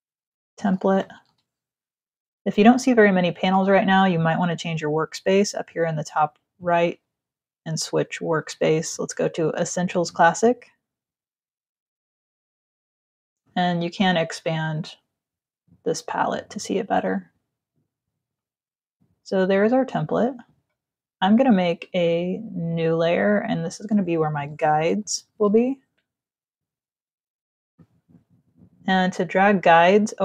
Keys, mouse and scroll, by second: 0.0-1.0 typing, 6.3 click, 9.9 click, 13.2 click, 17.6 click, 22.0 click, 23.0 click, 23.9-25.2 typing.